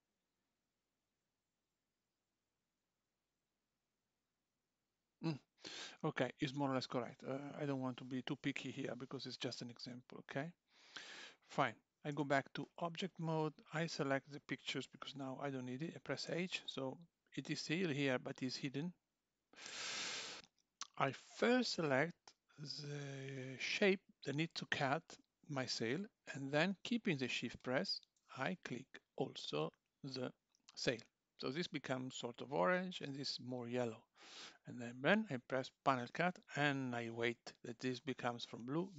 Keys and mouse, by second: 0.8 click, 1.2 g, 3.7 click, 3.8 g, 12.1 Tab, 13.4 click, 16.3 h, 18.8 click, 21.1 click, 27.6 shift+click, 35.9 click.